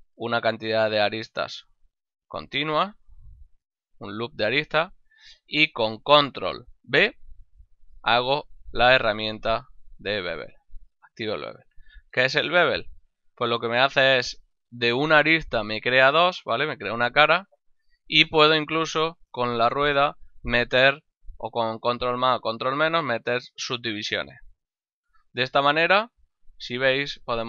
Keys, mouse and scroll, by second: 5.1 shift+middle click, 8.0 ctrl+b, 25.1 click, 25.5 Tab, 26.3 middle click.